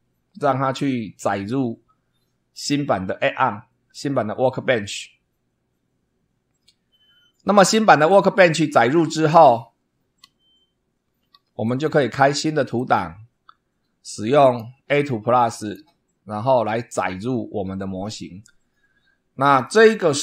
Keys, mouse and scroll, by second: 11.0 alt+F7, 11.6 alt+click, 12.7 click, 14.4 click, 15.5 click.